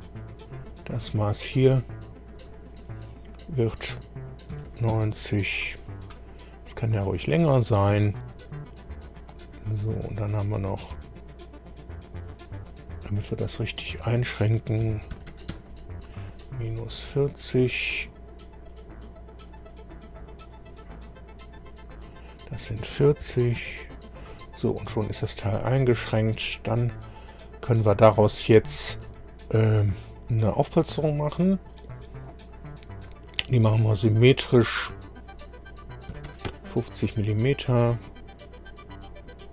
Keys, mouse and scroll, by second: 0.2 click, 2.4 click, 4.5 KP_9, 4.7 KP_0, 4.9 Return, 7.3-7.6 scroll up 2, 10.7 click, 12.1 click, 13.2 click, 14.8 KP_Subtract, 15.1 KP_4, 15.3 KP_0, 15.5 Return, 16.9 scroll down 1, 17.2 shift+middle click, 19.5 click, 20.4 click, 21.9 click, 23.2 KP_4, 23.4 KP_0, 23.6 Return, 25.0 scroll down 1, 26.1 click, 30.4 click, 31.4 click, 33.6 click, 34.8 click, 35.9-36.8 typing, 37.5 click, 37.6-39.5 middle drag.